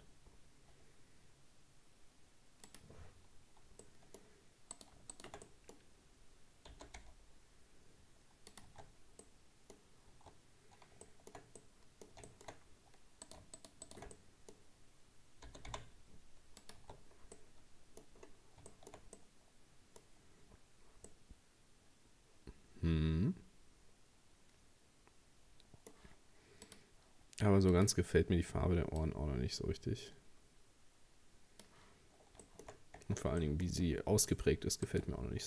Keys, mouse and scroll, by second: 3.1-3.8 scroll down 1, 3.8 middle click, 4.7 right click, 5.1 shift+right click, 5.5-6.7 middle drag, 6.7 g, 8.7 Tab, 8.9-9.2 scroll down 2, 9.2 middle click, 10.1 Tab, 11.1-12.5 shift+middle drag, 12.5-13.3 shift+scroll up 3, 13.3 right click, 13.6 shift+right click, 13.9 shift+right click, 14.1-15.5 middle drag, 15.5 g, 16.8 Tab, 17.0-17.4 scroll down 4, 17.4 middle click, 18.2-18.7 scroll down 2, 18.7-20.0 shift+middle drag, 20.0-21.1 scroll up 1, 21.1-24.1 middle drag, 26.7-30.7 drag, 32.0-32.4 scroll up 2, 32.4 shift+middle click, 32.7-33.0 shift+scroll up 1, 33.0 Tab, 33.4-34.9 middle drag, 34.9 right click.